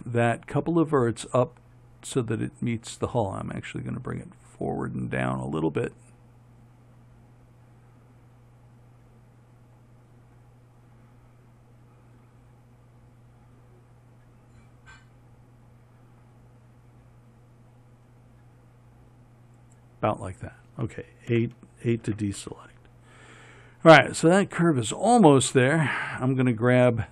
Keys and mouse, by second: 22.6 a, 26.1 a.